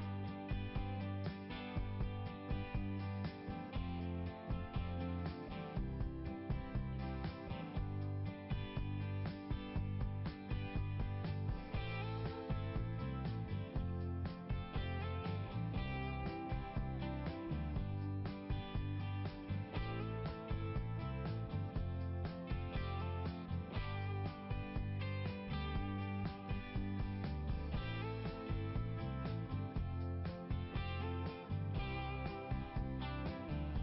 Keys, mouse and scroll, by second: 0.1 click, 0.4 click, 0.6 right click, 0.7 click, 1.3 click, 2.9 click, 4.3 click, 6.3 click, 6.6 click, 7.0 click, 7.3 click, 7.6 click, 8.0 click, 10.3 click, 12.2 click, 15.4 click, 18.7 scroll down 1, 19.6 click, 20.7-21.3 scroll down 1, 25.5 click, 29.6-29.9 scroll down 2.